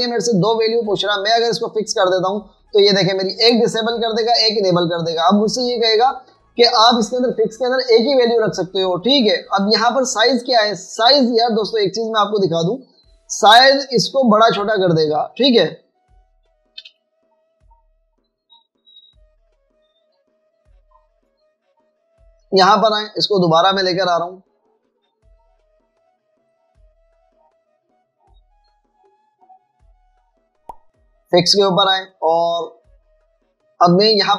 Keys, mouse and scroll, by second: 17.5 space, 17.9 v, 24.2 alt+click.